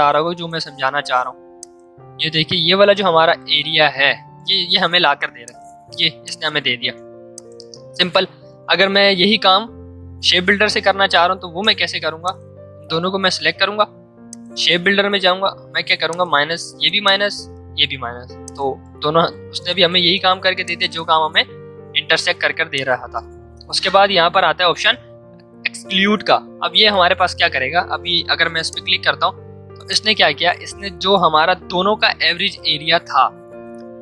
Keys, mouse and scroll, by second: 1.9-4.4 drag, 4.4 v, 5.3 click, 6.4 ctrl+z, 7.3 ctrl+click, 7.9 ctrl+shift+z, 8.5 ctrl+shift+z, 9.3 ctrl+shift+z, 11.4 ctrl+shift+z, 12.1-14.2 drag, 16.0-18.0 alt+drag, 18.0 v, 18.4 click, 19.3 ctrl+z, 20.3 ctrl+shift+z, 20.6 shift+click, 28.6 click.